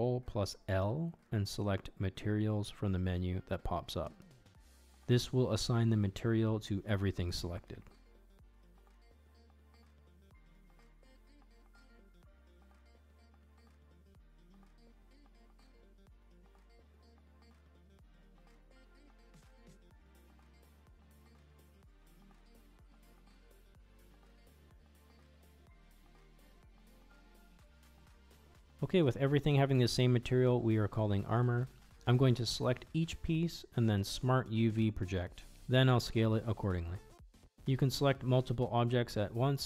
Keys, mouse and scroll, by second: 1.9 click, 4.1 ctrl+l, 6.1 shift+middle drag, 6.4-6.7 middle drag, 6.9-7.8 shift+middle drag, 10.5 click, 11.7 click, 13.2 click, 15.2-15.5 middle drag, 16.3 click, 17.4 click, 18.1 click, 18.8 middle drag, 19.7 middle drag, 20.9 click, 22.5 click, 23.3 click, 24.5 middle drag, 24.9-25.5 middle drag, 25.7-28.3 middle drag, 28.5 middle click, 29.6 click, 29.9 Tab, 30.0 middle click, 30.0 a, 30.2 u, 31.0 click, 31.4 ctrl+Tab, 32.0 shift+middle click, 32.4 Tab, 32.7 a, 32.9 s, 33.6 g, 34.1 shift+middle click, 34.3 ctrl+Tab, 34.4 click, 34.7 a, 34.7 s, 35.7 g, 36.0 Tab, 36.0 click, 36.2 middle click, 36.5 middle drag, 37.1 click, 37.4 Tab, 37.4 s, 37.7 g, 38.6 ctrl+Tab, 38.8 shift+click, 39.1 shift+middle drag, 39.2 Tab, 39.4 Tab.